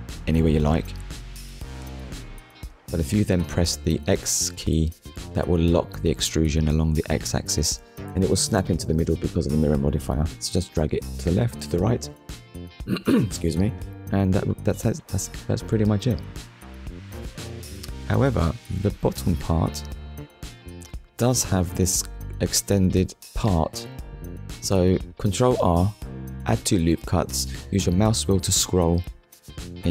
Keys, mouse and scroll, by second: 0.6 click, 2.0 Tab, 2.5 middle click, 4.6 Tab, 5.1 Tab, 5.9 Tab, 6.4 shift+middle click, 7.7 click, 8.1 middle click, 11.6 KP_1, 16.1 middle click, 20.7 ctrl+r, 23.4-23.8 scroll up 1, 24.3 click, 25.2 right click, 26.8 KP_1, 29.6 KP_3.